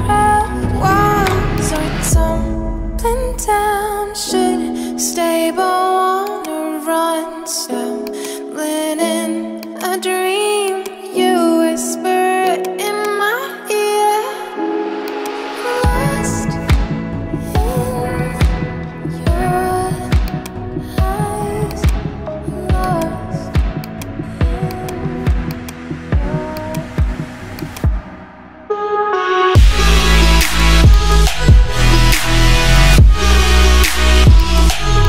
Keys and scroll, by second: 11.8 ctrl+j.